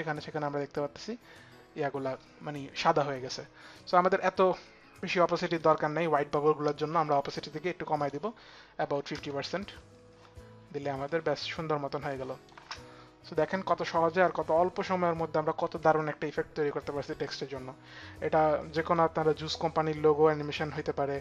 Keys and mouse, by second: 5.1 click, 6.6 click, 6.6 t, 7.3 click, 7.3 t, 7.6 click, 8.3 click, 8.7 click, 8.7 KP_0, 8.7 KP_5, 8.7 t, 10.7 Return, 10.7 click, 10.7 KP_0, 10.7 KP_5, 11.7 click, 12.1 space, 18.4 click, 19.4 click.